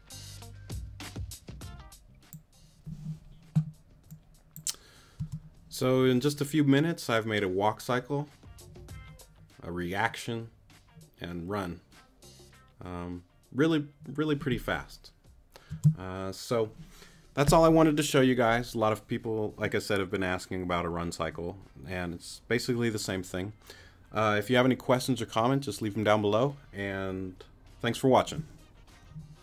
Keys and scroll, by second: 5.2 space, 15.7 space.